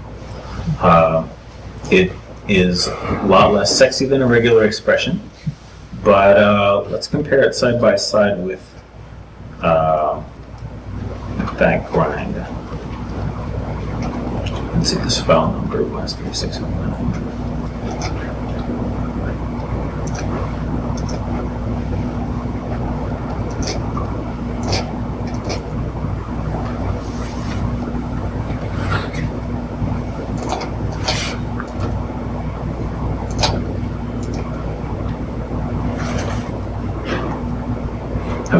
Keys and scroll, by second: 4.2 super+Tab, 5.9 ctrl+shift+Tab, 7.2 super+t, 8.4 super+Tab, 10.2 super+Tab, 11.4 super+Tab, 14.4 super+Tab, 14.9 super+Tab, 16.2 ctrl+shift+Tab.